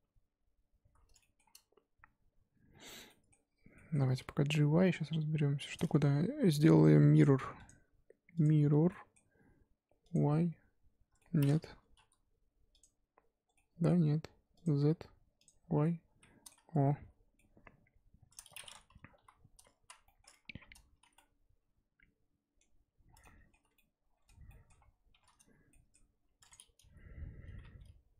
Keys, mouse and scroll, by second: 1.2 shift+middle click, 1.4-2.7 shift+scroll up 3, 2.7-3.1 scroll down 4, 3.1-4.7 middle drag, 4.7 g, 5.9 Tab, 8.4 click, 8.9-10.0 middle drag, 10.0-11.2 drag, 11.2 middle click, 12.0 KP_1, 12.7 click, 13.5-14.5 middle drag, 14.5-15.8 drag, 15.8 middle click, 16.8 z, 17.1 z, 17.3-18.7 middle drag, 18.7-19.1 scroll up 2, 19.1 KP_1, 19.8 z, 20.0 shift+middle click, 20.2-21.1 scroll up 3, 20.4 Tab, 21.1 z, 21.1-23.1 middle drag, 23.1 scroll down 4, 23.2-24.7 middle drag, 24.7-25.7 scroll up 2, 25.7 scroll up 1, 25.7 shift+middle click, 26.5 click, 26.8 g.